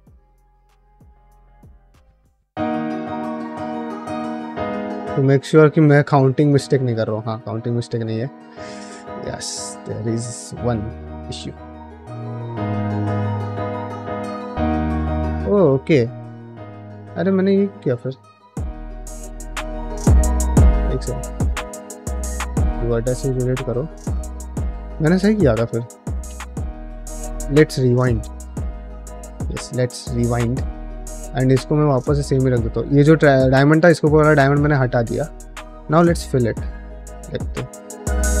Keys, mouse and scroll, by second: 0.6-4.4 typing, 0.8 click, 2.2 click, 3.2 click, 4.3 click, 4.8 middle click, 6.6 ctrl+middle click, 6.9 middle click, 8.1-10.9 typing, 8.3 click, 9.9 click, 11.6 click, 12.0 g, 16.3 click, 16.5 g, 17.0 click, 18.1 click, 18.3 g, 19.8 click, 20.1 click, 20.6 x, 22.0 ctrl+z, 22.3 x, 23.0 middle click, 23.5 click, 23.7 g, 24.7 middle click, 26.5 v, 27.6 2, 27.9 click, 28.1 ctrl+x, 28.5 click, 28.9 ctrl+x, 29.2 ctrl+x, 30.3 1, 30.6 click, 30.9 f, 31.5 2, 31.9 click, 32.1 f, 35.2-38.4 typing, 35.4 click, 37.0 click, 37.8 click.